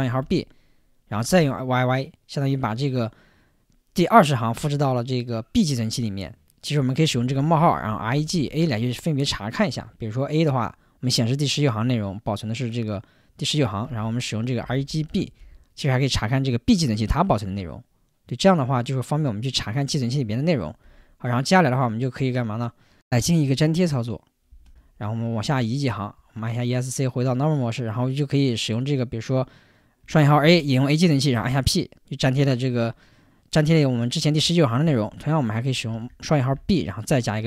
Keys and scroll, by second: 0.0-1.4 typing, 6.9-8.6 typing, 9.7 Return, 13.9-15.9 typing, 16.9 Return, 20.8 Return, 24.5 o, 25.5 Return, 25.8 Escape, 26.1 Escape, 30.1-31.4 typing, 35.9 shift+', 36.5 b, 37.3 p.